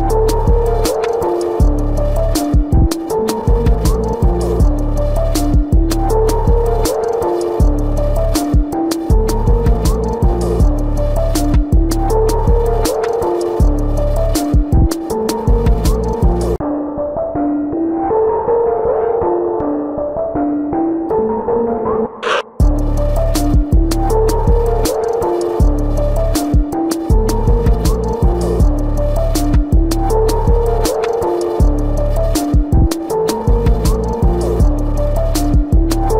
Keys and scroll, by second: 1.9 ctrl+alt+z, 26.6 ctrl+-, 27.7 ctrl+-, 34.4 space.